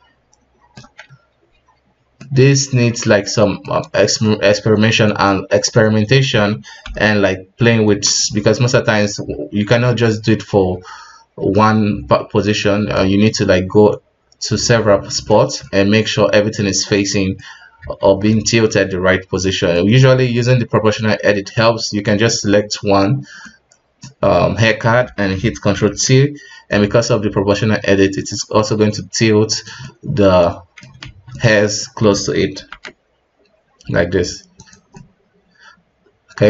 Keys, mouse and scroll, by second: 2.2-5.1 middle drag, 5.1 right click, 5.7-6.8 middle drag, 6.8-8.2 ctrl+KP_Add, 9.0-10.7 middle drag, 10.7 KP_3, 12.9-13.6 middle drag, 13.6 KP_3, 15.1 middle click, 15.6-17.9 middle drag, 17.9 alt+`, 18.3-25.7 middle drag, 25.7 ctrl+t, 29.8-31.0 middle drag, 31.0 alt+`, 31.3-32.5 middle drag, 32.5 ctrl+t, 34.9-36.4 middle drag.